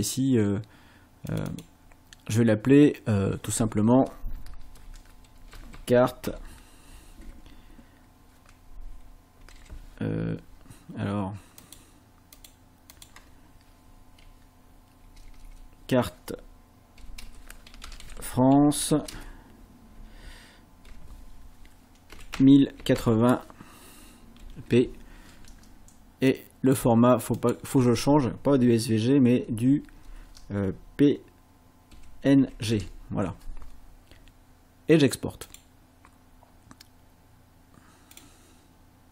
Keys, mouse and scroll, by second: 1.3 click, 4.7-6.3 typing, 9.2-10.0 typing, 11.7 click, 12.4 click, 13.0 click, 14.2 BackSpace, 17.2-20.0 typing, 22.1 KP_1, 22.3 KP_0, 22.8 KP_8, 23.0 KP_0, 24.4 shift+p, 26.3 click, 27.4 click, 29.4 BackSpace, 31.7-33.2 typing, 35.5 click, 38.2 click.